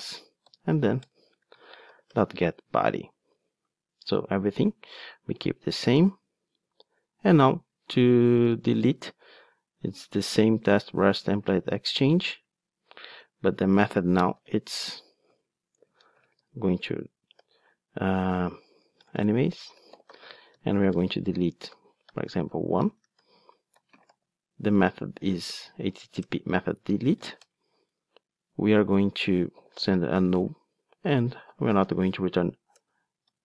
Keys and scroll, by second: 11.5 super+c, 26.3 Return, 32.8 Return.